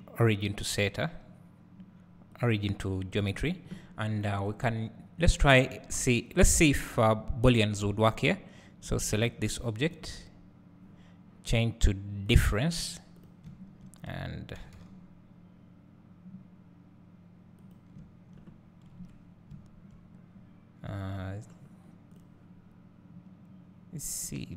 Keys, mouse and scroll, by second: 3.0 scroll down 1, 4.3 click, 6.8-9.2 drag, 12.4-13.3 drag, 13.6 `, 14.7 g, 18.1 `, 19.0 KP_Decimal, 19.7-20.6 drag, 19.7 `, 20.6 middle click, 21.1 click, 21.1 `, 22.2 click.